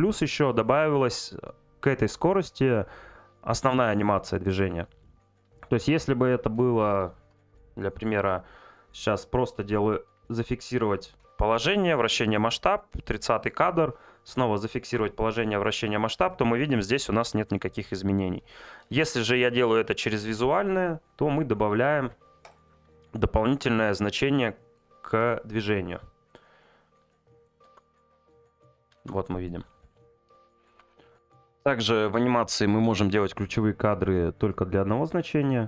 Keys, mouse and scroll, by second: 3.6 click, 7.1 click, 12.1 click, 16.3 click, 23.6 click, 27.1 click, 35.4 right click.